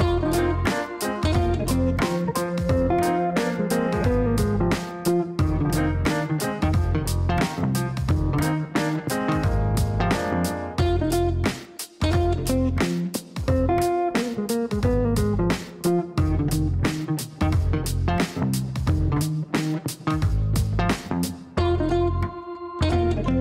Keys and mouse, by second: 0.8-3.0 typing, 4.0 Down, 5.7-6.5 typing, 6.7 Down, 6.8 Down, 7.2 Down, 7.5 Return, 8.9 click, 12.2 click, 13.7 middle click, 16.2 click, 18.8 middle click, 20.2 click, 21.4 click.